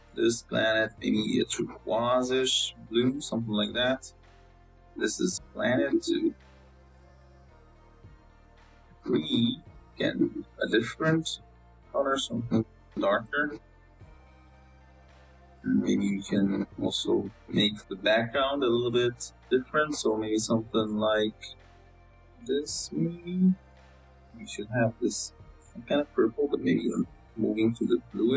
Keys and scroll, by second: 15.1 x, 15.3 z, 17.1 z, 19.1 z.